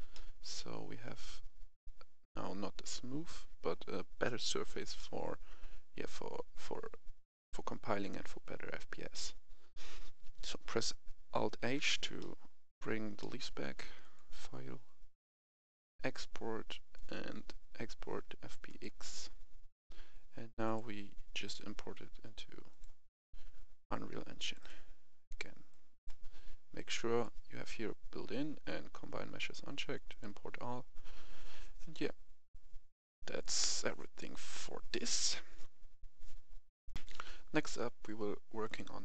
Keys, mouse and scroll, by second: 0.1 middle click, 1.1-1.5 scroll up 1, 1.7-7.9 middle drag, 11.5 alt+h, 12.1 middle click, 12.6-13.1 scroll down 1, 13.1 middle click, 14.0-36.9 drag, 36.9 F10, 38.6 click.